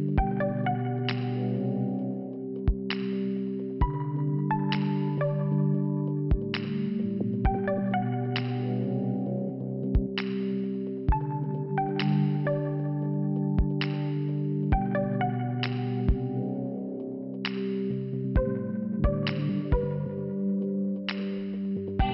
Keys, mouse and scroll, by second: 1.5 click, 1.6 click, 1.7 click, 1.8 double click, 3.0 double click, 3.1 double click, 3.8 click, 4.0 click, 5.3 click, 5.5 click, 6.1 click, 7.2 c, 8.4 click, 8.6 click, 10.2 click, 10.3 click, 11.8 click, 15.6 click, 15.7 click, 16.4 scroll down 2, 20.3 click, 21.8 click, 21.9 click.